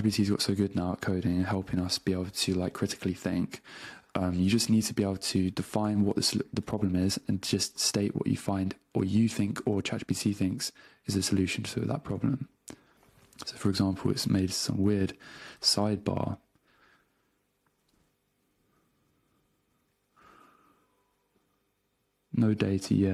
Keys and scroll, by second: 5.1 super+space, 6.6 Return, 8.8 super+q, 9.7 super+space, 10.2 Return, 12.9 super+space, 13.3 a, 14.1 BackSpace, 14.5 super+space, 15.3 Return, 18.4 Page_Up, 18.9 ctrl+Home, 19.9 ctrl+Page_Up.